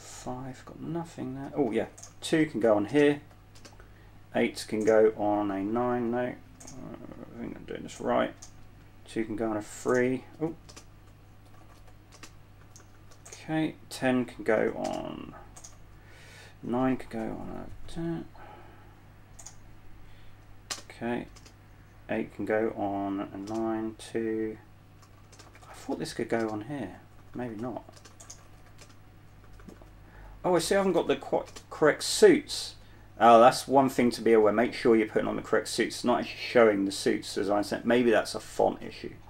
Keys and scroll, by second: 0.7-3.9 typing, 5.8-7.6 typing, 10.0-15.9 typing, 18.2 typing, 21.0-21.6 typing, 23.8 typing, 25.0-31.9 typing, 33.0-36.3 typing.